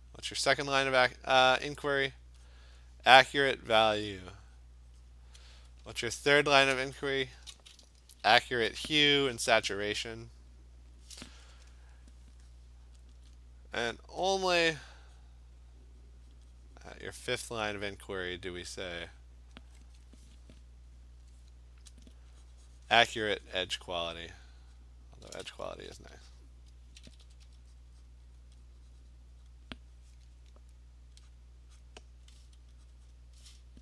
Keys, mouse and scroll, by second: 0.3 click, 0.6 click, 1.0 click, 1.2 click, 1.8 alt+click, 2.2 click, 2.5 click, 3.2 alt+click, 3.6 alt+click, 3.9 alt+click, 4.4 click, 4.7 click, 5.1 click, 7.4 click, 8.5 [, 9.2 [, 13.1 alt+click, 14.6 click, 15.0 click, 15.1-18.2 alt+click, 15.2 click, 16.1 click, 16.4 click, 16.9 click, 17.4 click, 17.7 click, 18.0 click, 18.7 click, 22.1-22.6 alt+click, 22.6 click, 23.9 click, 24.2 click, 24.8 click, 25.3 alt+click, 26.9 ], 27.1 ], 27.3 ], 27.5 ], 27.8 click, 28.1 click, 28.4 click, 29.5 click, 31.4 click, 31.8 click, 33.0 click, 33.1 click.